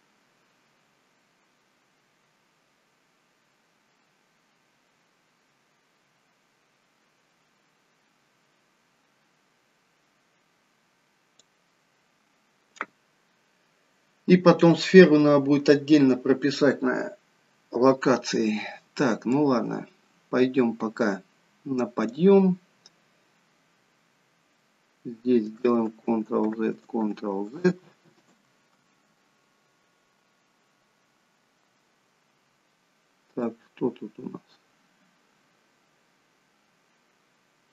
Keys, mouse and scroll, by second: 19.5 click, 26.1 ctrl+z, 26.8 ctrl+z, 27.4 ctrl+z, 28.0 ctrl+z, 28.6 ctrl+z, 33.5 click.